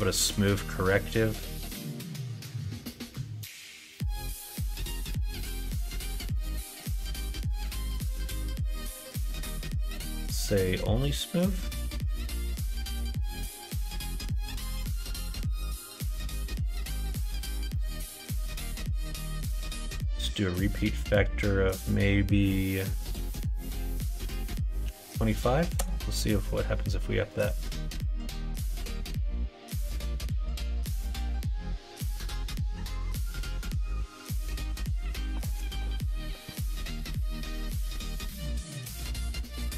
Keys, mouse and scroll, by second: 6.3 middle click, 16.8 middle click, 17.7 middle click, 19.3-34.5 drag, 37.6-39.7 middle drag.